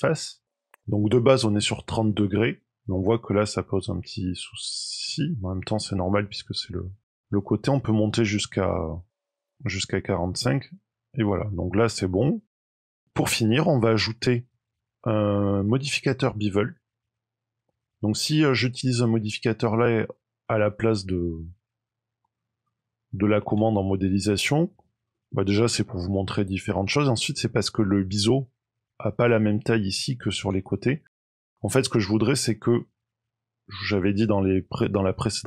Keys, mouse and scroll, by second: 2.2 middle click, 2.6-5.2 scroll up 2, 5.3-6.8 scroll down 3, 6.8 middle click, 7.8 click, 9.7 middle click, 10.2-10.7 scroll down 3, 10.6 middle click, 11.9 middle click, 12.8 click, 12.9 middle click, 13.1-13.5 scroll up 2, 16.9-17.3 scroll down 2, 17.3 scroll up 1, 20.0-20.5 scroll up 2, 23.8 Tab, 25.2 shift+middle click, 30.7 Tab, 31.9 shift+middle click, 35.2-35.4 scroll down 2.